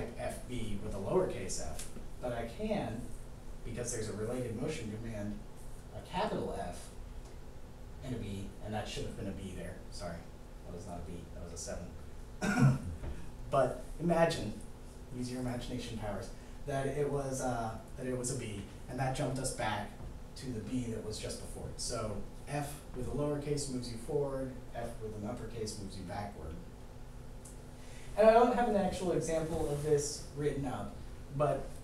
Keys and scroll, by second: 5.9 shift+f, 8.0 7.